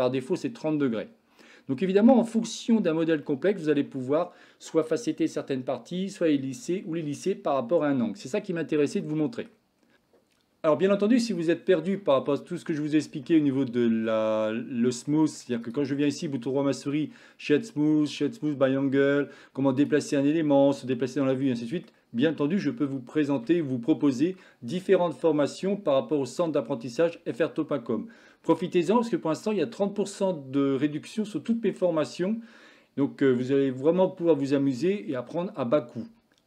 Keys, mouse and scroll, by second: 0.0-2.2 middle drag, 3.2-3.7 shift+middle drag, 9.1-9.5 middle drag, 13.3-14.2 shift+middle drag, 15.1 middle click, 16.0-19.7 right drag, 19.7 click, 20.7-21.9 middle drag, 22.7-23.4 shift+middle drag, 29.0 middle click, 33.9-34.9 middle drag.